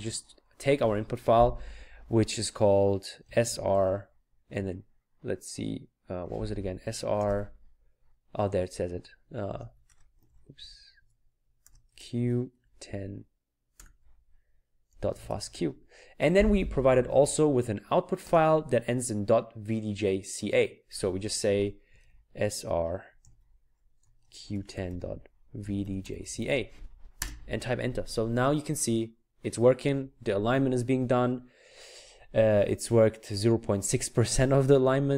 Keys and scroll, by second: 3.0-3.9 typing, 4.4 Tab, 9.5 space, 10.6-12.5 typing, 13.7 typing, 14.9-15.4 typing, 21.9 typing, 23.2 typing, 24.3-27.1 typing.